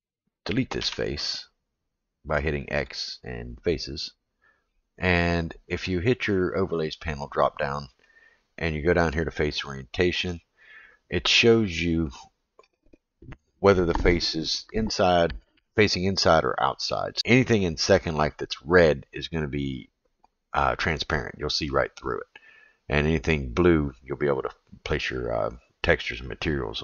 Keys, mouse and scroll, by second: 0.8 x, 6.7-10.6 drag, 11.4-16.9 middle drag.